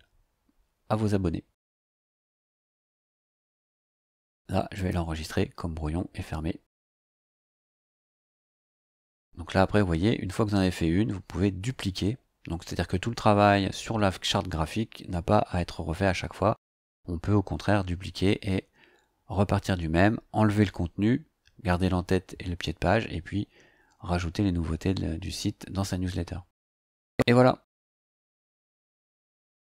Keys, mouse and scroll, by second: 0.4 scroll up 2, 1.1 scroll up 2, 2.4 scroll down 2, 4.7 click.